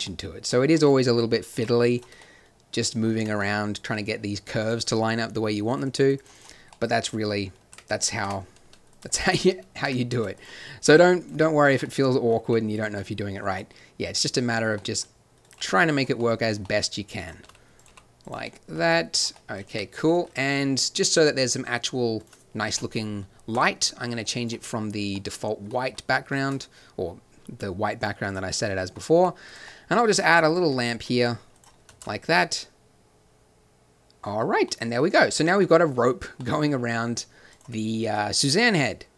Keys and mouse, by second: 0.6 middle click, 0.8 z, 1.0 r, 1.5 g, 2.0 z, 3.1 Tab, 4.6-6.3 drag, 7.7 Tab, 8.2 Tab, 8.6 z, 9.8 Tab, 10.1 z, 10.8 r, 11.3 g, 12.4 r, 15.5 g, 17.4 r, 17.8 g, 18.9 g, 19.7 Tab, 26.3 shift+a, 29.1 g, 30.1 g, 31.1 g, 32.2 shift+z, 35.8 click, 36.0 click, 36.8 click, 37.5-39.1 drag.